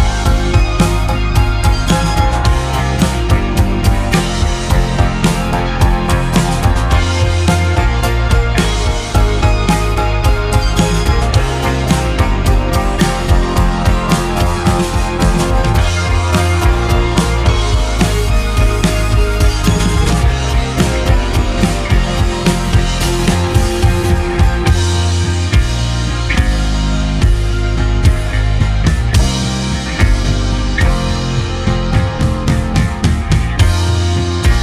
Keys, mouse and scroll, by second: 6.3-8.2 middle drag, 8.2 Tab, 8.8-12.5 drag, 13.9 e, 19.6-20.3 scroll up 1, 20.3-21.7 shift+middle drag, 21.7 1, 28.7-29.3 scroll down 1, 29.3-30.1 scroll down 1, 30.1 middle click, 30.8 Tab, 32.9 Tab, 33.9 Tab.